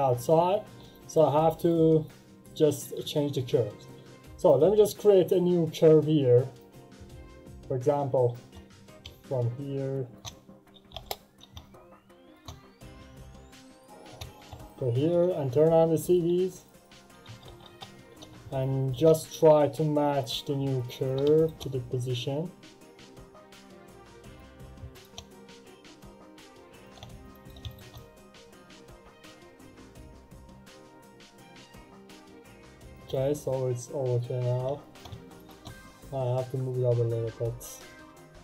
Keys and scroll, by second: 10.8 Delete, 10.9 Return, 17.0 2, 17.2 Return.